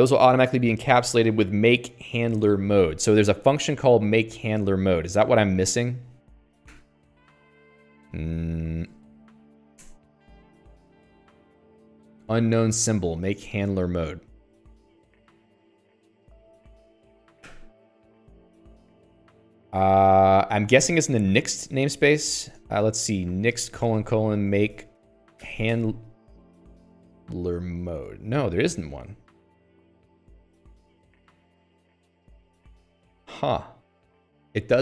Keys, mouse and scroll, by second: 7.2 shift+k, 8.6 Escape, 9.0 Escape, 9.4 alt+x, 10.2 Return, 16.3 click, 17.9 0, 19.1 click, 19.2 Escape, 19.3 Escape, 19.4 Escape, 20.3 Escape, 20.5 Escape, 21.2 Escape, 22.0 alt+x, 22.9 Return, 23.5-26.4 typing, 30.0-31.6 typing.